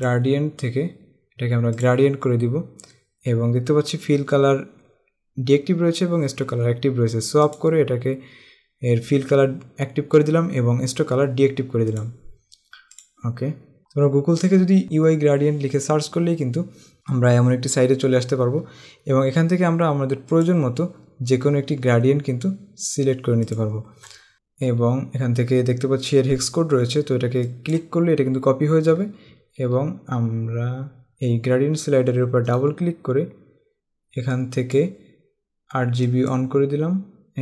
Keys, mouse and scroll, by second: 0.1 click, 2.0 click, 7.7 click, 12.1 click, 13.8 Tab, 20.6 click, 23.7 click, 27.6 click, 29.1-29.8 typing.